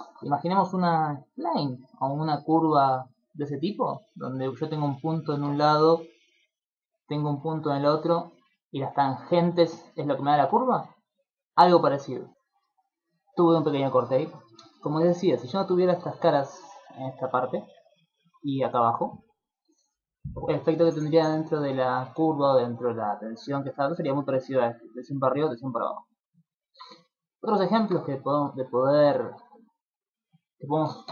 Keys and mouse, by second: 4.7 click, 6.0-10.8 typing, 6.3 click, 7.3 click, 8.4 click, 9.2 click, 10.0 click, 16.5 click, 16.7 click, 16.7-19.6 typing, 16.9 click, 17.4 click, 17.6 click, 18.1 click, 18.5 click, 18.8 click, 19.2 click, 26.0 middle click, 26.6 ctrl+middle click, 27.0 shift+middle click, 27.4 middle click, 27.8 ctrl+middle click, 28.0 shift+middle click, 28.8 ctrl+middle click.